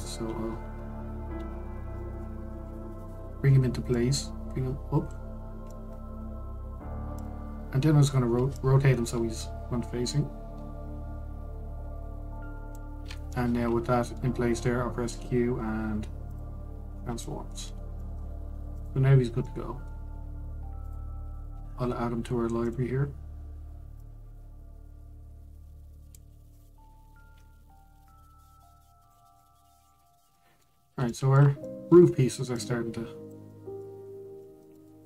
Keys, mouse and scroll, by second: 2.0 alt+g, 2.7-3.1 middle drag, 3.1-4.6 scroll up 2, 4.6 click, 6.1-6.4 scroll down 2, 6.4-7.8 middle drag, 7.8-9.3 drag, 14.0-15.7 middle drag, 15.7 q, 17.5-17.9 scroll down 1, 17.9 middle click, 18.3 Tab, 18.6 middle click, 19.2 Tab, 19.4 click, 20.1-21.5 middle drag, 21.5 click, 21.8-22.5 scroll down 1, 23.3 click, 24.7 click, 27.2 click, 28.7 click, 30.1-30.7 middle drag, 30.7 scroll down 1, 31.0-33.2 middle drag, 33.2 drag, 34.2-34.6 middle drag, 34.6-35.0 scroll up 2.